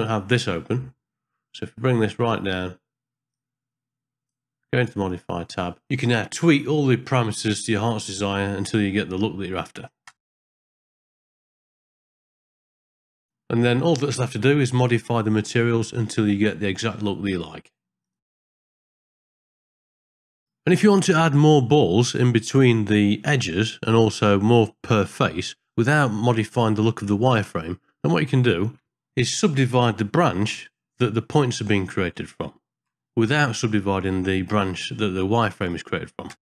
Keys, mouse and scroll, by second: 3.3 click, 5.1 click, 6.4 middle click, 6.5 ctrl+middle click, 7.2 click, 8.3 click, 10.0 click, 10.6 click, 10.8 KP_0, 11.6 KP_Enter, 12.6 KP_Enter, 13.3 shift+middle click, 13.5 click, 13.7 middle click, 14.1 middle click, 15.7 ctrl+middle click, 16.5 ctrl+b, 16.8 click, 17.3 middle click, 17.4 click, 17.6 middle click, 17.7 click, 18.3 ctrl+b, 18.9 click, 19.0 KP_0, 19.2 click, 19.5 KP_Enter, 19.8 ctrl+alt+b, 20.0 middle click, 20.3 click, 23.2 middle click, 27.3 ctrl+space, 28.2 ctrl+middle click, 29.0 middle click, 35.2 middle click, 36.3 click.